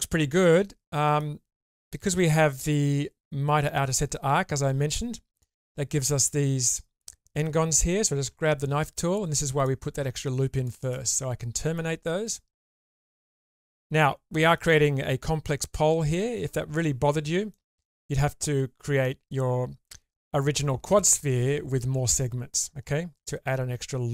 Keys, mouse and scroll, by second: 8.2 k, 14.3 click, 14.3 middle click, 17.5 middle click.